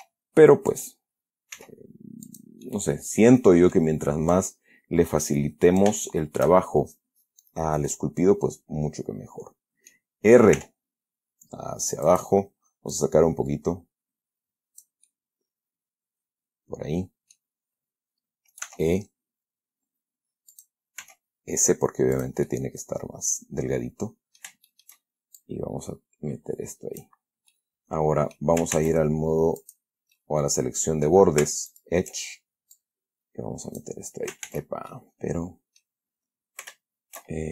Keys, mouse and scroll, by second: 0.2 e, 1.0 click, 1.9 s, 2.6 click, 3.0-4.3 middle drag, 4.6-6.3 drag, 6.4 shift+middle click, 8.2-10.4 middle drag, 10.9 r, 12.4 click, 13.3-15.3 drag, 15.4-17.9 middle drag, 19.0 e, 20.8 click, 21.3 s, 22.5 click, 22.8-24.3 middle drag, 24.3 scroll down 1, 25.0 shift+middle click, 25.7-27.5 shift+drag, 27.8-28.9 middle drag, 29.1 ctrl+Tab, 29.9 click, 30.5-31.6 middle drag, 32.0 alt+shift+right click, 33.1-34.3 drag, 34.8 ctrl+z, 35.2-36.3 ctrl+middle drag.